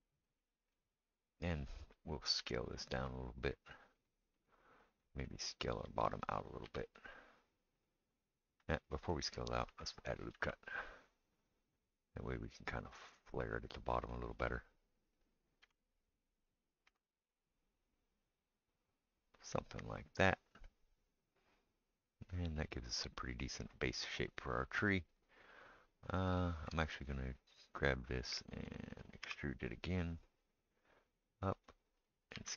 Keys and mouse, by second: 2.4 s, 5.7 click, 6.8 s, 10.3 ctrl+r, 14.4 click, 15.7 3, 16.9 s, 29.2 e, 32.3 s.